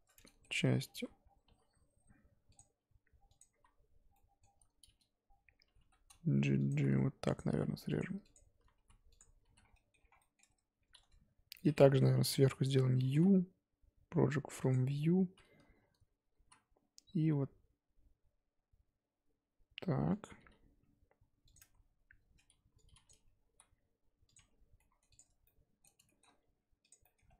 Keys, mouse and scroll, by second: 0.2 middle click, 0.9 ctrl+r, 3.6 z, 4.1-5.7 middle drag, 5.7 g, 6.7 3, 8.0 alt+click, 9.2 x, 9.5 z, 9.6-10.2 scroll down 3, 9.7 middle click, 10.2 middle click, 10.4 Tab, 10.7 Tab, 11.0 a, 11.5 middle click, 12.1 KP_7, 14.7 u, 16.5 z, 17.1 r, 20.4 g, 21.6 Tab, 22.2 Tab, 23.1 click, 23.4 g, 24.3 Tab, 24.8 middle click, 25.1 click, 25.4 middle click, 26.3-26.9 scroll up 1, 26.9 click, 27.0 middle click, 27.2 scroll up 1, 27.3 Tab.